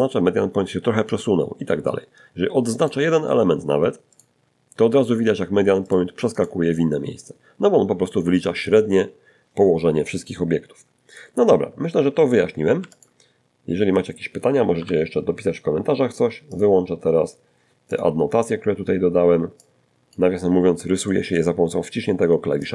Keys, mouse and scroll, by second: 1.0 shift+right click, 2.4 shift+click, 4.1 shift+click, 4.6 shift+right click, 11.0 x, 11.2 click, 13.0 n, 14.8 click, 16.1 click, 16.5-17.0 scroll down 1, 17.8 click, 19.3 shift+middle click, 20.6 d, 20.8 d, 20.8 click, 20.8 d.